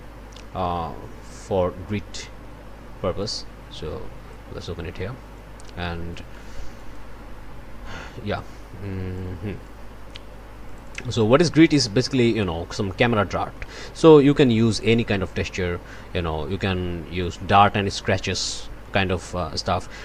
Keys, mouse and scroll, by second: 0.1-0.8 scroll up 2, 0.9 scroll down 1, 1.2-2.0 scroll up 2, 3.2-4.5 drag, 5.3 click, 6.7 click, 7.8 click, 9.1 click, 10.6 click, 13.5 click, 15.3 click, 15.9 middle click, 17.2 click, 19.2 click.